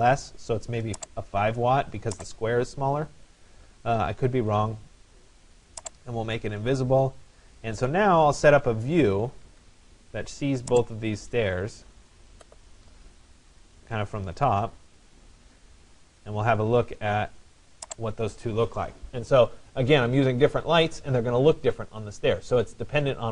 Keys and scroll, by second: 9.3 Escape, 14.0 Escape.